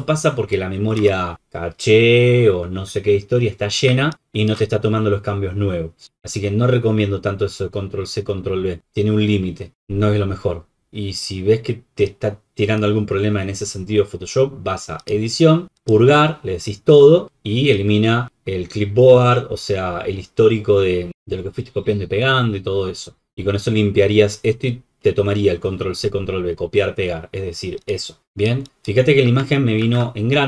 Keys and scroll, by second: 1.0 alt+Return, 29.4 ctrl+z.